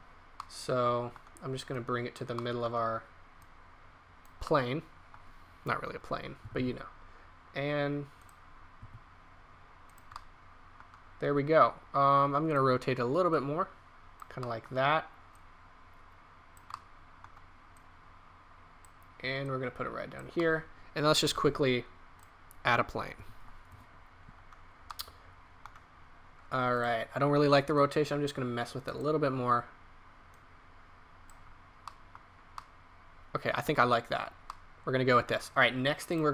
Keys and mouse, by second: 0.4 middle click, 1.7-2.1 drag, 3.4 click, 6.4 r, 8.8 r, 15.0 click, 17.1-17.6 drag, 20.4-21.4 drag, 21.4 shift+a, 23.1 s.